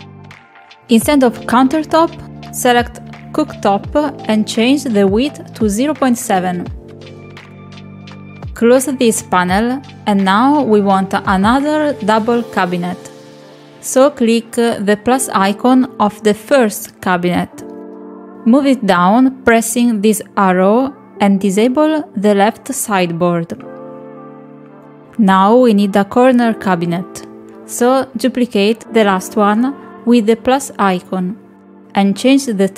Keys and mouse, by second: 0.9 click, 1.9 middle click, 2.7 middle click, 4.1-5.8 drag, 7.9 click, 11.3 click, 20.7 click, 24.5 click, 26.2 click, 29.5 click.